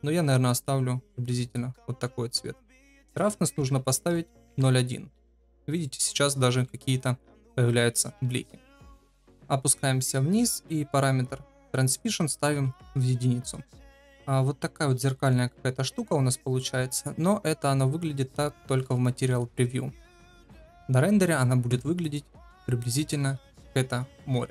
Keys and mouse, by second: 1.4 ctrl+v, 2.9-5.4 drag, 5.8 middle drag, 6.6 shift+middle drag, 9.2 ctrl+z, 11.8-13.2 drag, 13.8-14.8 middle drag, 15.2-16.9 middle drag, 20.1-21.3 middle drag.